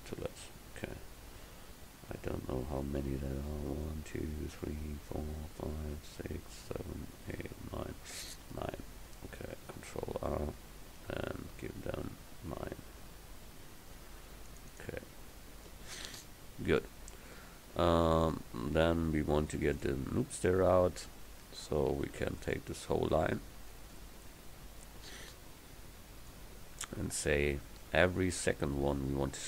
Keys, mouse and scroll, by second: 2.2 ctrl+z, 9.4 ctrl+r, 16.9-18.9 middle drag, 24.0-25.6 middle drag.